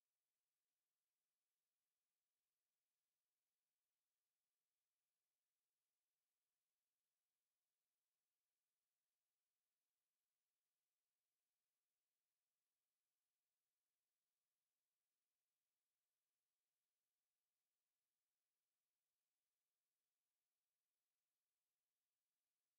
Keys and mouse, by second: 5.6 click, 5.7 click, 13.9 click.